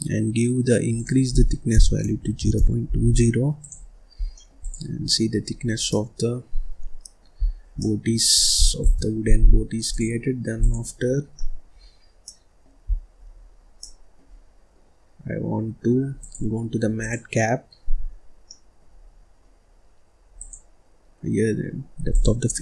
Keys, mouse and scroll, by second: 4.1 scroll down 1, 4.3 middle click, 4.6 click, 5.1-5.8 scroll up 2, 5.8-7.2 middle drag, 7.2 scroll up 1, 7.3-7.7 scroll down 1, 7.7-8.8 middle drag, 8.8 shift+s, 9.8-11.1 drag, 11.1 scroll down 2, 11.3 middle click, 11.7-12.2 scroll up 1, 12.2 middle click, 12.8-13.3 scroll down 1, 13.3-13.8 scroll up 1, 13.8-16.1 middle drag, 16.1-18.3 drag, 18.3 scroll down 1, 18.4 middle click, 18.9-20.3 scroll up 1, 20.3-22.6 drag.